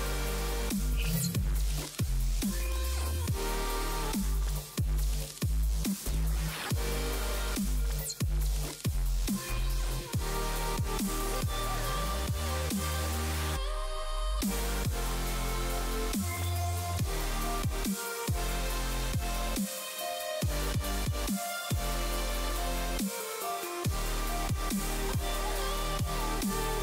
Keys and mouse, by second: 0.0 click, 0.2 click, 1.1 click, 1.7 click, 2.3 click, 2.8 click, 2.9 click, 3.2 click, 4.0 click, 4.5 click, 4.8 click, 5.0 click, 5.2 click, 5.7 click, 6.3 space, 6.6 click, 6.7 click, 7.8 click, 9.0 space, 10.4 click, 11.3 click, 12.0 space, 12.1 click, 13.5 click, 14.1 click, 14.4 click, 14.6 click, 14.8 click, 14.9 click, 15.1 click, 15.6 x, 15.7 click, 15.8 click, 16.0 click, 16.2 click, 16.4 click, 16.7-21.0 typing, 16.8 click, 17.1 click, 17.7 click, 18.2 click, 18.7 click, 20.4 click, 20.6 click, 21.8 click, 22.0 click, 22.2 click, 22.4 click, 22.8 click, 23.0 click, 23.5 space, 24.4 click, 24.5 click, 25.6 click, 26.7 click.